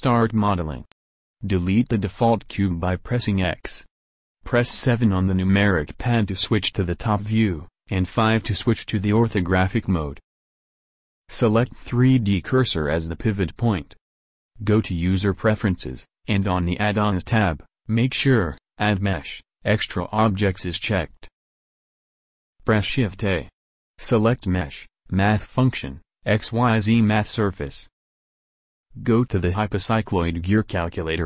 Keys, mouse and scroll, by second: 4.3 KP_7, 5.3 KP_5, 23.6 shift+a, 28.5-29.6 drag, 30.7 alt+Tab, 30.8 click, 31.1 alt+Tab.